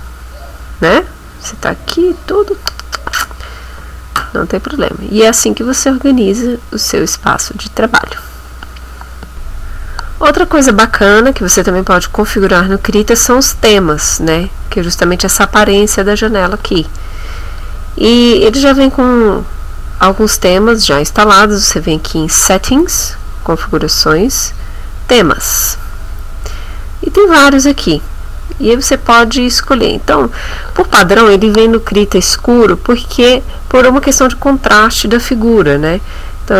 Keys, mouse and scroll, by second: 0.9 middle click, 9.3 click, 12.4 click, 22.8 click.